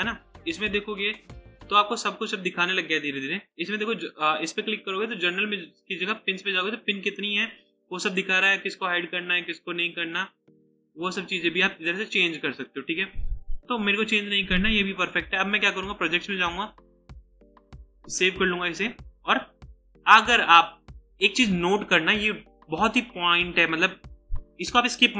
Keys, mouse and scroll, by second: 3.5 double click, 17.3 right click.